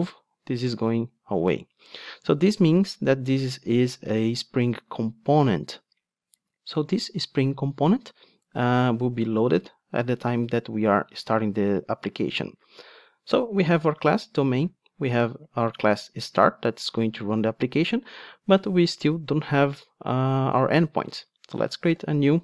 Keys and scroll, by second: 2.1 super+z, 22.0 super+n.